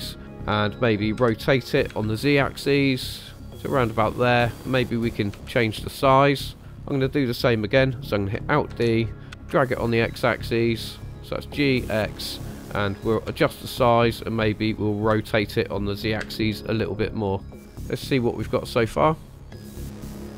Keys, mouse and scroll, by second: 1.1 r, 1.9 z, 4.0 click, 5.3 s, 6.5 click, 8.9 alt+d, 9.3 x, 11.9 ctrl+click, 13.3 s, 14.0 click, 15.2 r, 16.2 z, 17.6 click, 18.7 click, 19.5 space.